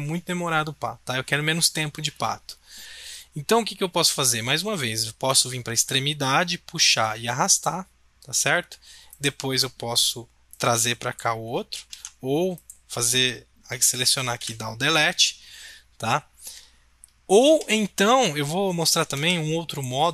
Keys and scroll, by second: 11.9 ctrl+z, 14.4 Delete, 17.4 ctrl+z, 19.1 ctrl+z.